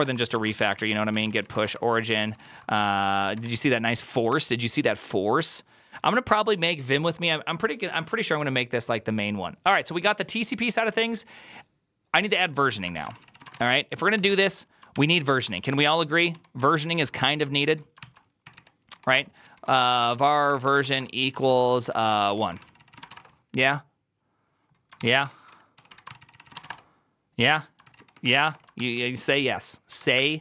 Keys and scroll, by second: 0.0-3.8 typing, 4.1 Return, 12.6 ctrl+a, 12.8 1, 12.9 ctrl+c, 13.1 ctrl+c, 13.2 ctrl+c, 13.3 ctrl+:, 13.9-15.4 typing, 14.8 ctrl+t, 15.0 ctrl+c, 15.4 ctrl+u, 15.6 ctrl+u, 15.9 ctrl+u, 16.2 ctrl+u, 17.4 ctrl+u, 17.4-23.4 typing, 17.9 ctrl+c, 24.8-28.8 typing, 27.7 ctrl+c, 27.8 ctrl+c, 29.9 ctrl+d.